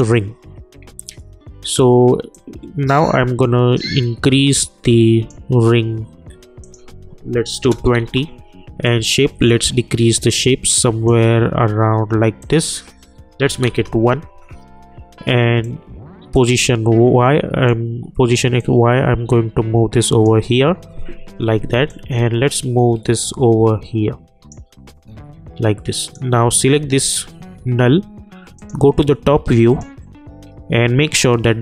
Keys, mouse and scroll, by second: 2.3-6.6 drag, 8.0 Return, 8.8-12.4 drag, 13.6 Return, 15.6-25.0 drag, 25.0 scroll up 1, 26.0 click, 28.5 click, 30.7 scroll up 1.